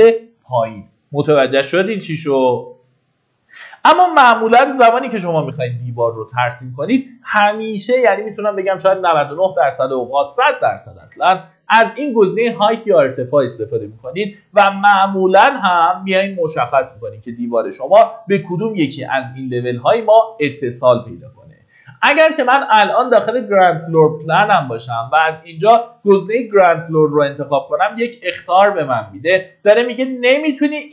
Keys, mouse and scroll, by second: 3.8 Delete, 4.4 click, 4.6 Delete, 6.8 middle click, 7.1-8.0 typing, 9.6-30.9 drag.